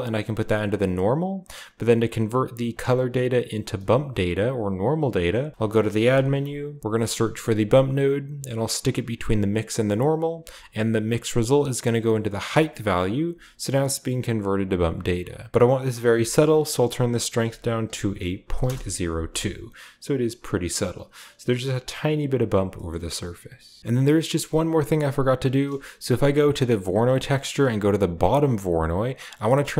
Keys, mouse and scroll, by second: 2.6 click, 3.5 click, 4.1 shift+a, 5.3 click, 5.9 typing, 7.4 click, 9.2 click, 9.6 click, 11.6-12.4 drag, 13.2-14.1 scroll up 1, 14.1-14.7 scroll up 1, 15.9 click, 17.3 click, 17.3-18.5 typing, 18.5 Return, 19.5 scroll down 1, 20.6 scroll up 1, 22.1-22.7 scroll down 2, 22.7 middle click, 23.1-23.8 drag, 23.6-24.9 scroll down 1, 23.6 g, 23.8 shift+Tab, 23.8-24.9 shift+middle drag, 25.8-26.2 scroll up 2, 25.9-28.5 middle drag, 27.2 scroll up 1, 27.7 g, 28.5 click, 28.6 right click, 28.6-29.7 scroll up 1.